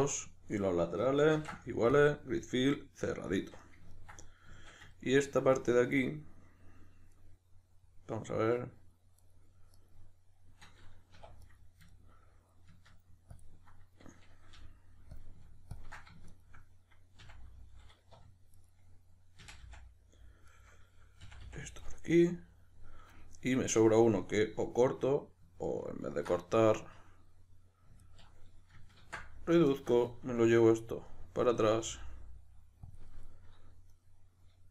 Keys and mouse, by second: 1.4 ctrl+f, 2.4-9.2 middle drag, 9.2 right click, 9.7 right click, 11.1 1, 11.4 right click, 11.9-13.3 ctrl+middle drag, 13.3-14.5 ctrl+drag, 14.5 g, 15.1 click, 15.7-16.3 ctrl+drag, 16.3 shift+right click, 17.2 f, 18.6 right click, 19.4 f, 20.5 right click, 21.2 f, 21.9-28.0 middle drag, 28.0 alt+right click, 29.0 ctrl+x, 29.7 alt+right click, 31.1-33.0 middle drag, 31.7 g, 33.0 click, 33.9 right click.